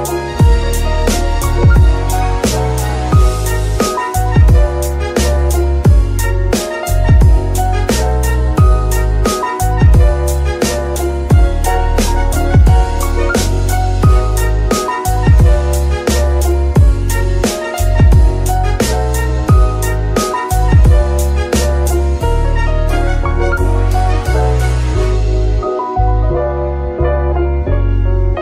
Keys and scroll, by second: 19.3 ctrl+shift+c, 19.9 v, 20.6 c, 21.8-23.0 typing, 22.1 Return, 24.2 g, 27.3 z.